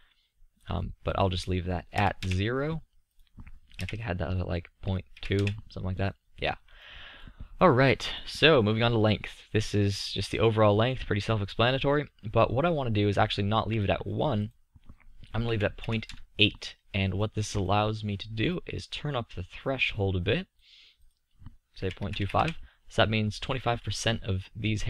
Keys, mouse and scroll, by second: 1.0 middle click, 3.1 click, 3.3-6.4 middle drag, 7.9-11.8 middle drag, 14.5-16.5 middle drag, 17.5-18.7 middle drag, 18.7-20.7 drag, 20.7 middle click, 20.7-21.2 scroll up 1, 21.2-23.2 drag, 23.2 middle drag, 23.2 scroll up 1, 23.8-24.6 middle drag.